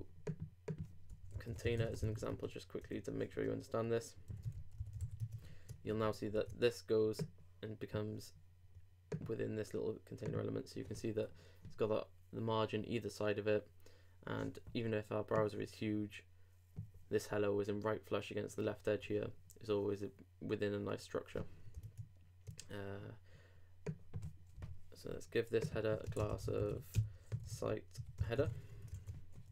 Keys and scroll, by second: 3.4 shift+Return, 5.0 super+s, 5.2 super+Tab, 26.9 shift+', 27.3 shift+s, 28.9 super+r.